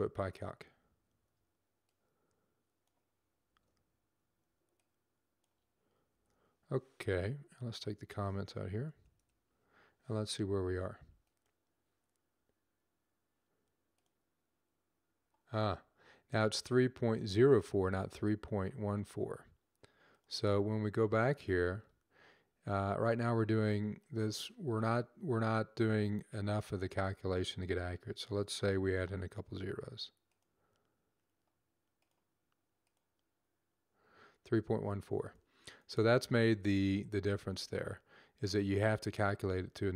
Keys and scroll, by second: 3.2 ctrl+c, 5.9 ctrl+v, 28.5 typing, 30.9 typing.